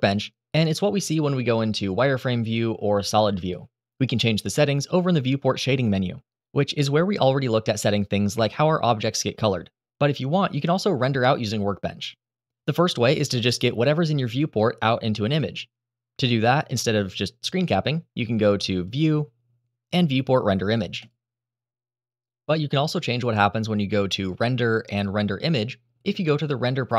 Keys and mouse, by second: 2.2 click, 5.1-11.0 drag, 14.4-15.2 middle drag, 18.6-21.1 drag, 24.1-25.2 drag.